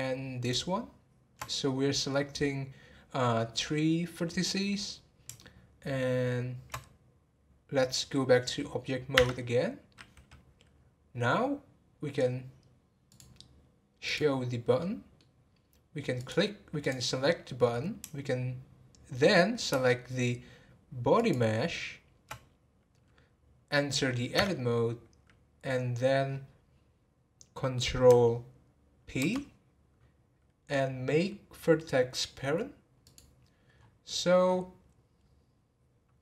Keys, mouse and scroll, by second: 0.4 shift+click, 5.4-8.6 shift+middle drag, 13.0 click, 14.0 click, 14.8-16.1 middle drag, 16.1 click, 16.8 click, 21.1 shift+click.